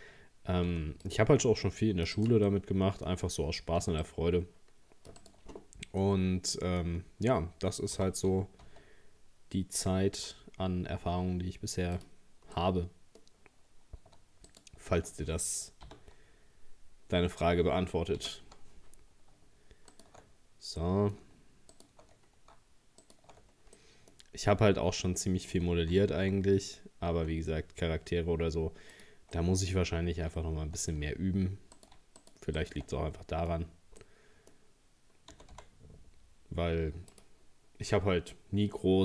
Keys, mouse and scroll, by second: 0.7 c, 2.5-3.8 middle drag, 3.8 c, 5.5-6.0 scroll down 6, 6.0 middle click, 6.9-8.0 scroll up 4, 8.0 g, 12.6-14.5 middle drag, 14.5 alt+shift+right click, 15.9 ctrl+g, 18.2 ctrl+z, 19.0-19.9 scroll up 4, 19.9 alt+shift+right click, 20.8 middle click, 21.8 alt+shift+right click, 23.1 alt+shift+right click, 23.4-23.8 scroll down 2, 23.8 middle click, 24.2-25.5 scroll up 2, 25.5 g, 29.4 middle click, 29.8-30.4 scroll up 1, 30.4 shift+middle click, 30.9-31.8 scroll up 3, 31.8 right click, 32.2 shift+right click, 32.6 shift+right click, 32.9 middle click, 33.7-34.0 scroll down 3, 34.0-35.3 middle drag, 35.3 g, 38.3-39.0 middle drag.